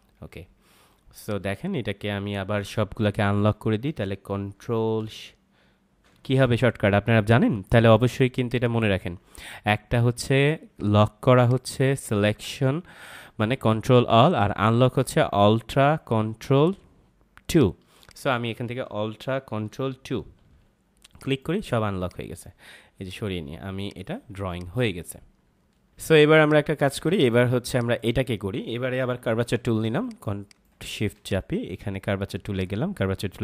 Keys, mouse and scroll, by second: 0.5 ctrl+-, 1.2 click, 5.5 ctrl+shift+Num_Lock, 8.4 click, 11.3 click, 17.5 click, 20.3 ctrl+alt+2, 24.3 space, 24.4 click, 24.8 space, 25.9 ctrl+m, 26.2 space, 26.3 click, 26.7 space, 27.1 click, 27.5 space, 27.7 click, 27.7 space, 28.9 ctrl+=, 29.9 space, 29.9 click, 30.5 space, 30.7 click, 30.9 space, 31.2 click.